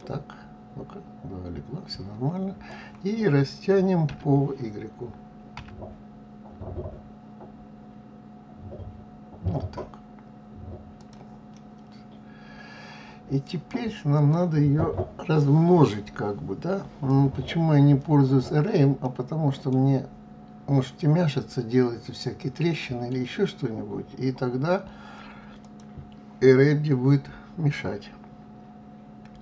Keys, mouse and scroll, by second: 4.0 s, 11.5-14.1 middle drag, 14.1 click, 19.0-21.9 middle drag, 25.5 click, 29.3 s.